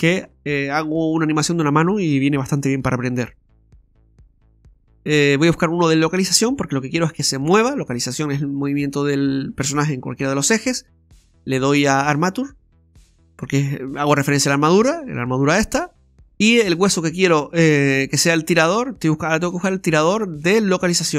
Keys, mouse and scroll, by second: 11.3 click, 16.8 click.